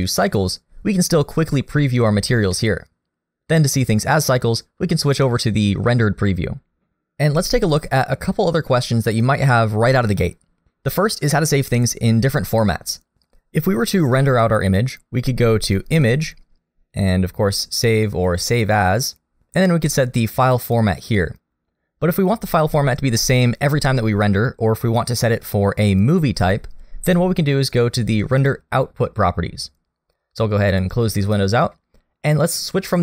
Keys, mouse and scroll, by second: 2.5 middle click, 5.2 click.